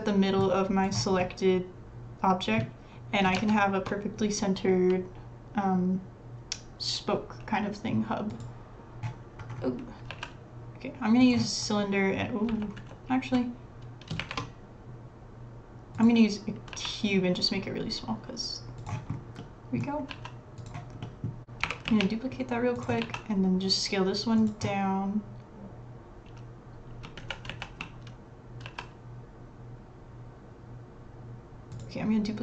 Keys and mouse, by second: 0.8 click, 1.2 middle click, 3.4 shift+a, 9.4-12.5 drag, 10.1 s, 12.6 ctrl+z, 12.9 ctrl+z, 14.2 shift+a, 16.7 s, 19.4 middle click, 20.1 s, 21.1 middle click, 21.4 g, 21.4 shift+d, 21.8 g, 23.0 s, 27.2 ctrl+z, 27.5 ctrl+z, 28.6 s.